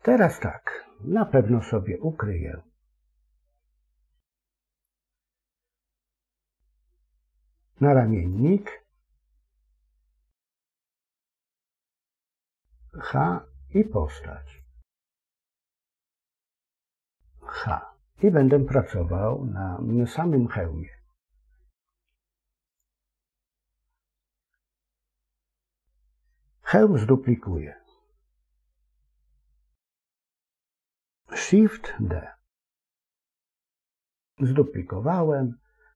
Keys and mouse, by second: 8.1 click, 10.7 click, 12.8 h, 14.4 click, 17.4 h, 22.6 click, 30.1 a, 32.8 shift+d.